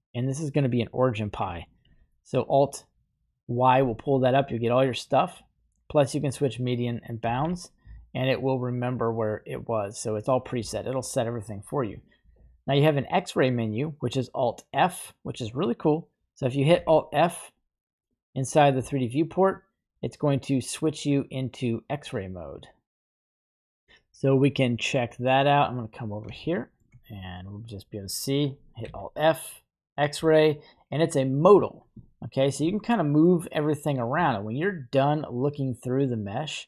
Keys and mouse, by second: 0.2 middle click, 1.9 alt+y, 7.3 alt+y, 24.4-25.0 middle drag, 26.3-26.8 shift+middle drag, 28.8 alt+f, 32.0 shift+middle click, 32.7 middle click, 36.4 middle click.